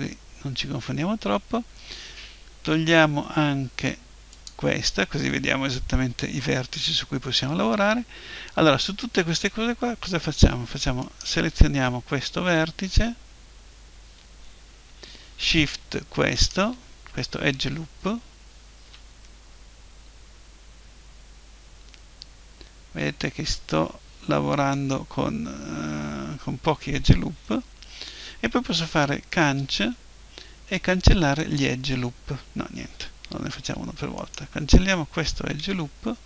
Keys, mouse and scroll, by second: 4.3-6.1 drag, 11.0-12.9 right drag, 16.3-18.2 right drag, 19.2-21.2 middle drag, 29.4 Delete, 34.2-36.2 right drag, 35.6 Delete.